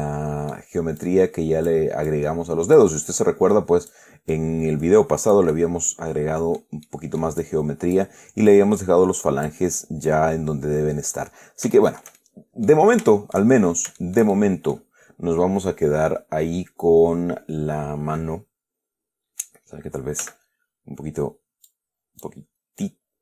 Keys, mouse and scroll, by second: 0.8 scroll down 2, 1.3 click, 2.4 click, 3.3-4.4 drag, 4.6-7.1 drag, 5.8-7.1 right drag, 7.1-7.7 middle drag, 8.8-9.9 drag, 10.4-11.6 drag, 12.1-13.2 shift+middle drag, 13.4-13.8 shift+middle drag, 13.8 shift+scroll up 2, 14.3-15.2 shift+middle drag, 20.5 g, 22.0 click, 23.1 click.